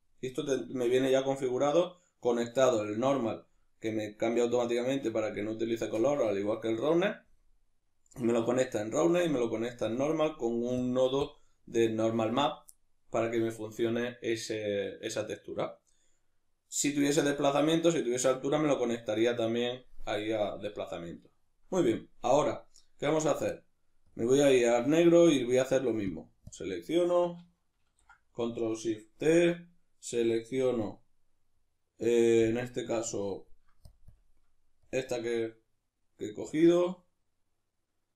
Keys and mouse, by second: 10.8 click, 11.2 click, 17.6-24.1 middle drag, 24.1 click, 26.1 drag, 26.5 click, 27.9 ctrl+shift+t, 36.0-38.1 middle drag.